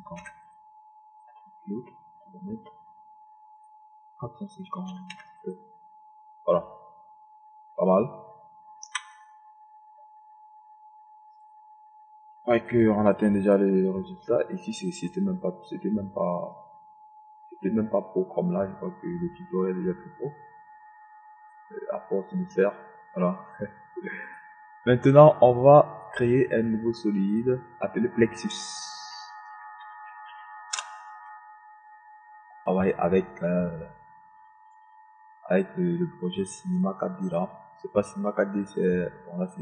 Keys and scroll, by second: 0.6 KP_5, 1.6 KP_0, 5.6 KP_4, 5.8 KP_5, 6.2 KP_0, 31.7 Return.